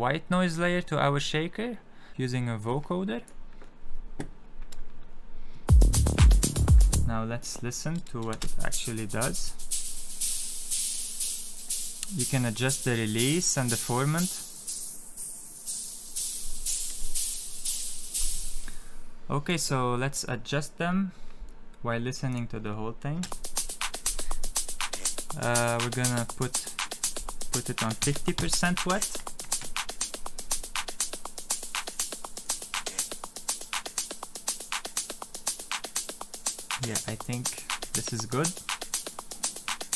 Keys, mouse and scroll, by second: 2.5 click, 5.5 space, 6.7 space, 7.3 click, 8.3 space, 9.3 click.